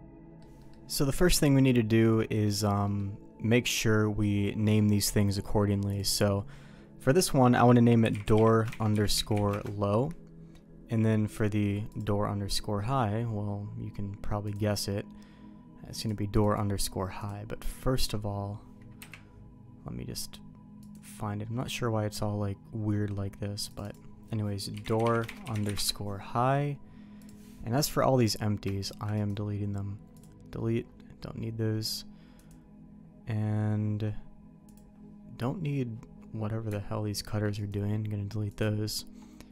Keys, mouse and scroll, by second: 0.2 middle click, 0.6 middle click, 2.3 middle click, 2.8 middle click, 4.2 middle click, 5.9-10.6 drag, 8.2 o, 11.9 click, 14.4 click, 16.0 click, 17.2-19.0 drag, 19.0 KP_Decimal, 20.9 click, 23.7 click, 25.0-26.4 drag, 28.8 shift+click, 29.1-30.2 right drag, 34.7-36.3 drag, 37.1 shift+click, 37.6-38.6 right drag.